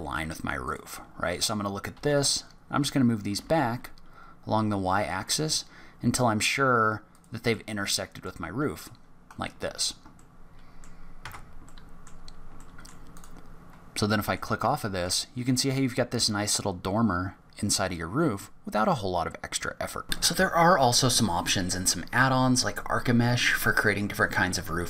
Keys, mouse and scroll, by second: 0.6 click, 1.9 g, 7.5 middle click, 9.3-10.2 scroll down 8, 10.1 middle click, 11.2 Tab, 11.6 middle click, 12.1-12.4 scroll down 2, 12.5 middle click, 13.1 click, 13.7-14.1 scroll down 1, 14.1 middle click, 14.6 shift+middle click.